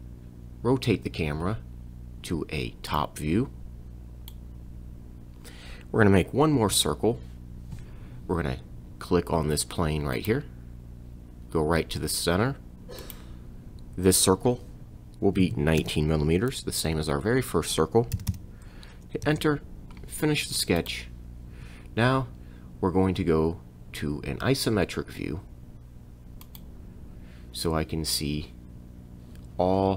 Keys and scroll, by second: 6.6 c, 15.4 1, 15.8 9, 19.3 Return.